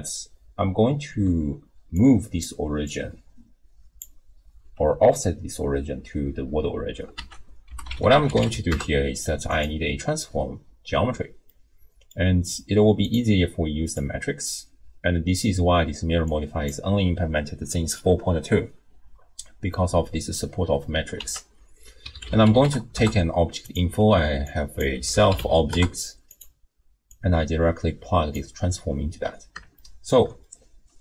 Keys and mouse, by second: 1.1-4.6 d, 2.0 click, 2.8-4.1 drag, 7.2 ctrl+a, 11.5 click, 13.0-14.0 drag, 16.4 click, 21.2 ctrl+a, 24.5-26.5 drag, 27.1-28.5 drag, 29.7-30.2 shift+drag, 30.5 click.